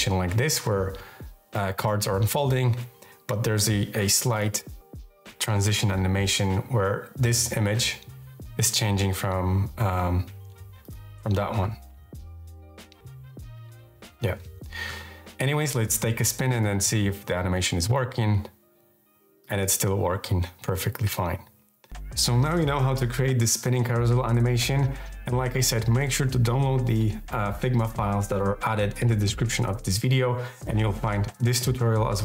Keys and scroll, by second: 3.0 Left, 9.6 Left.